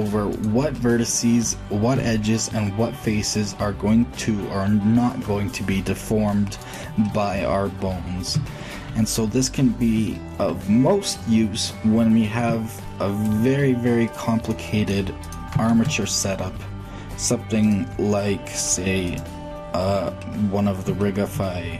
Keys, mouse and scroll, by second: 1.7 shift+g, 7.6-12.2 middle drag, 12.2 shift+Tab, 13.9 click, 15.5 shift+a, 16.9 click.